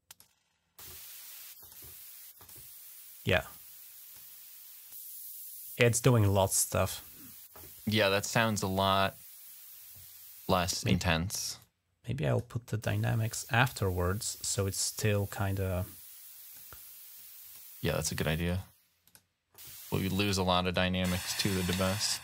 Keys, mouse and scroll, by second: 1.4 click, 2.2 click, 3.3 click, 4.7-6.9 drag, 11.4 click, 15.6 click, 17.0 click, 18.2 click, 18.8 click, 20.0 click, 20.4 click, 20.7 click, 21.9 click.